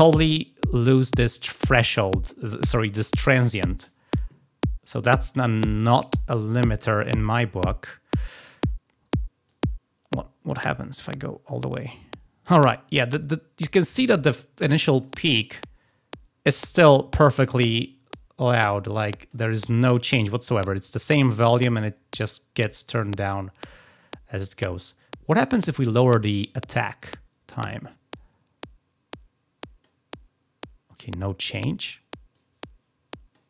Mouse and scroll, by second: 9.3-12.6 drag, 14.9 click, 18.0-19.2 drag, 26.9-29.8 drag, 30.9 click, 32.2-33.2 drag.